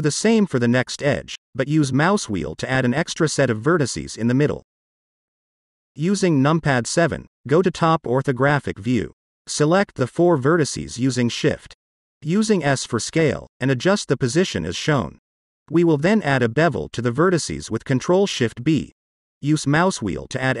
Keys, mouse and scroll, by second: 0.7 alt+click, 1.2 alt+click, 2.3 ctrl+b, 3.7-4.1 scroll up 1, 4.8 click, 5.2 click, 5.5-6.8 middle drag, 7.6 KP_7, 9.2 click, 10.5 shift+click, 11.2 shift+click, 11.9 shift+click, 12.7 s, 16.0 click, 17.5 ctrl+shift+b, 20.0-20.6 scroll down 1.